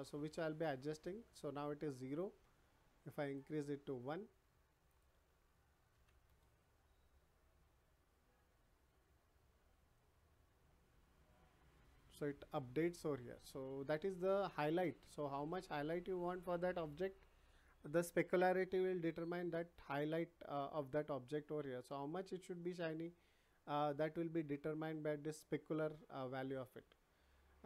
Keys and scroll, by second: 5.9 1, 6.2 Return.